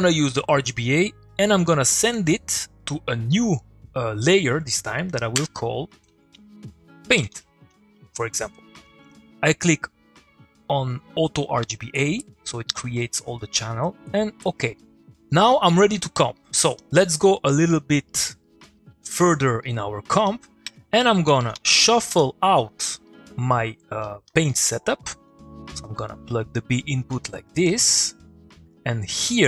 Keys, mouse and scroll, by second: 1.7-3.3 drag, 6.0 shift+Num_Lock, 6.1-8.0 typing, 11.9 click, 14.0-14.7 click, 16.0 click, 17.0 middle click, 19.4 click, 19.6 middle click, 20.3 click, 20.6 Tab, 21.2-21.6 typing, 21.9 Down, 22.1 Return, 22.8 middle click, 23.1 click, 24.0 middle click.